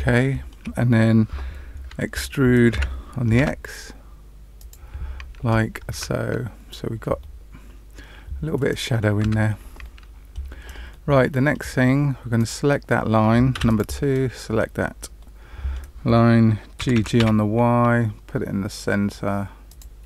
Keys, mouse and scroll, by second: 0.0 shift+middle click, 2.7 e, 4.5 e, 5.8 Tab, 6.6-7.1 scroll down 2, 7.1 middle click, 9.2 Tab, 9.8 middle click, 10.8 middle click, 12.3 click, 13.5 2, 13.6 click, 15.1 middle click, 16.7 g.